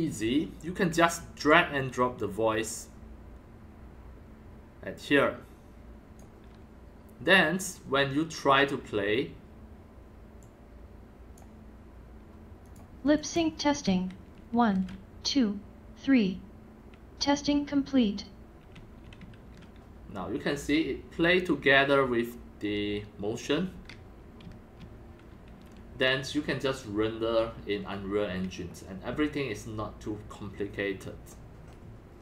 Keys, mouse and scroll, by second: 1.5-3.1 drag, 4.8-7.7 drag, 10.4 click, 12.6 click, 13.1-14.8 typing, 13.1 click, 18.4-21.2 typing, 22.4-23.2 typing, 24.4 Escape.